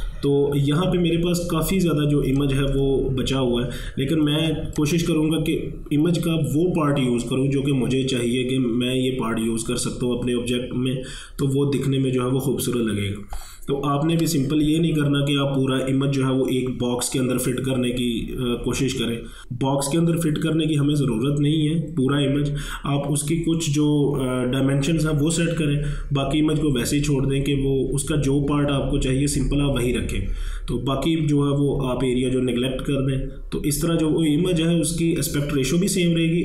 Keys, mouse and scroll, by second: 2.4-8.6 drag.